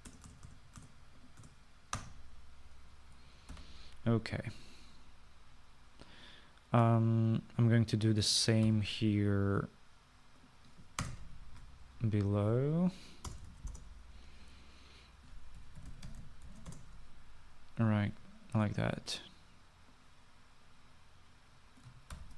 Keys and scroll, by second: 1.2-3.6 BackSpace, 4.6 ctrl+s, 9.8 ctrl+c, 12.1 Return, 12.3 ctrl+v, 14.4 Return, 14.6 }, 14.8 Return, 16.5-18.1 typing.